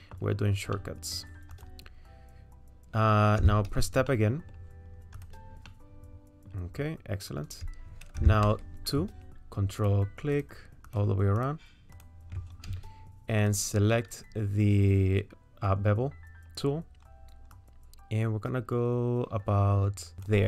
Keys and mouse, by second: 0.8 middle click, 1.6 click, 3.4 Tab, 4.1 middle click, 5.7 middle click, 8.2 2, 9.2 ctrl+click, 9.9 ctrl+click, 10.9 ctrl+click, 11.4 ctrl+click, 13.5 click, 17.7-20.3 drag.